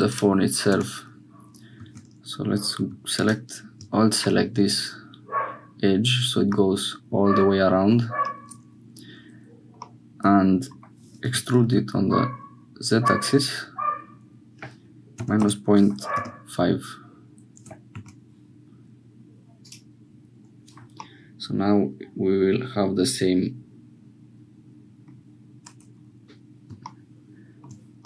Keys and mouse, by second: 0.1-1.1 drag, 1.1 Tab, 6.5-7.9 middle drag, 9.8 middle click, 11.9 e, 20.2 Tab, 21.0-25.2 middle drag, 27.2 shift+click.